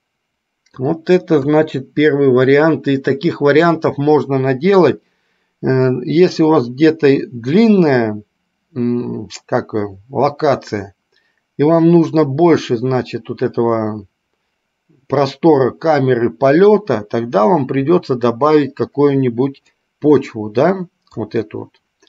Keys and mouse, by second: 0.1-1.1 middle drag, 19.9-21.4 middle drag.